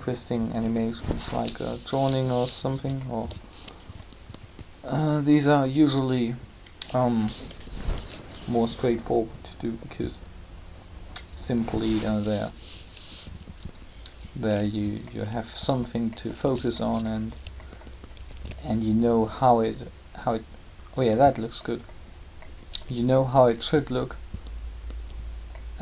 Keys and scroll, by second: 7.5 7, 12.7 r, 18.3 alt+a.